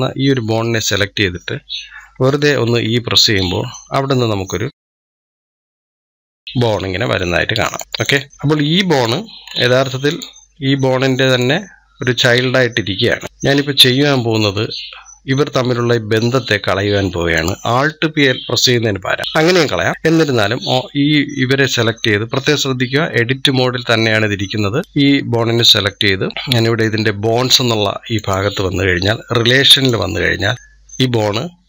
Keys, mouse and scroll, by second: 0.0 scroll up 5, 2.4 e, 7.8 scroll down 2, 7.9 click, 8.3 scroll up 2, 8.7 click, 9.2 scroll up 2, 9.9-13.2 drag, 13.2 ctrl+z, 14.3 scroll up 3, 17.2-18.7 drag, 28.0-30.2 drag, 30.2-30.6 scroll down 2.